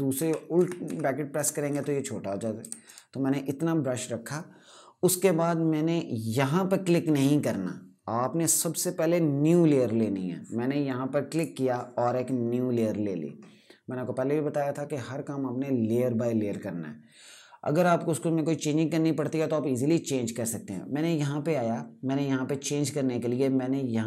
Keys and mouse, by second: 0.0-3.1 typing, 11.0 click, 23.9 click.